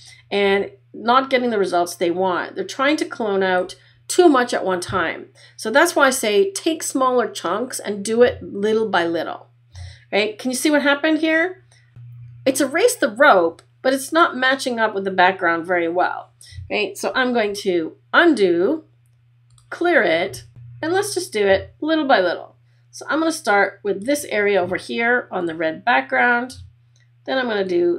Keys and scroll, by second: 17.5 super+z.